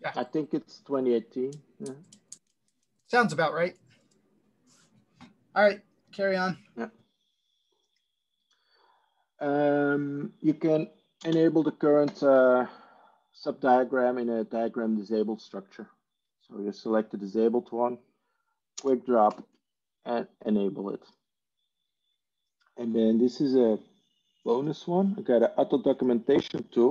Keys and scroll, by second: 11.2 ctrl+space, 12.2 ctrl+4, 19.4 ctrl+space, 19.4 ctrl+4.